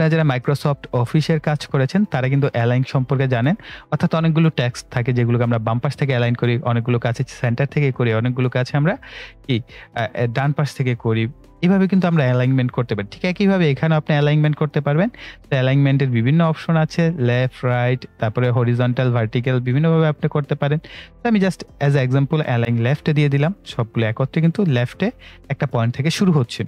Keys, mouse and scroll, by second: 22.6 click.